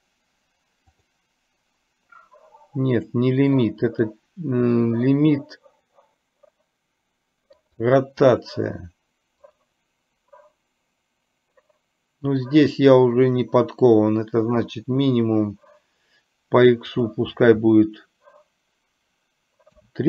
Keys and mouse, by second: 1.0 click, 3.1 click, 4.0-7.9 drag, 9.5 click, 17.0-20.0 drag.